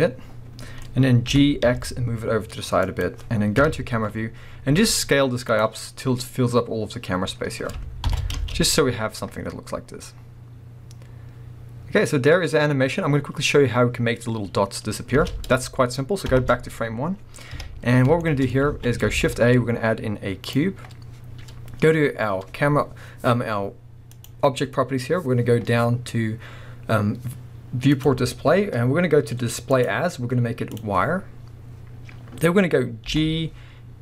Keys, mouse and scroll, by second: 0.0-3.0 middle drag, 0.9-1.3 scroll down 2, 1.3 g, 3.0 click, 3.6 KP_0, 4.4 scroll up 2, 4.7 s, 5.6 click, 5.7-6.2 scroll up 1, 7.1-7.6 scroll down 2, 7.3 middle click, 8.0 shift+Left, 8.3 space, 8.9-9.4 scroll up 1, 15.2 space, 16.3 shift+Left, 17.0-17.5 scroll down 1, 17.5 KP_1, 18.2-24.1 shift+middle drag, 18.5 scroll up 1, 18.7 alt+a, 24.1 click, 27.9-34.0 drag, 28.4-29.8 scroll down 1, 33.1 g.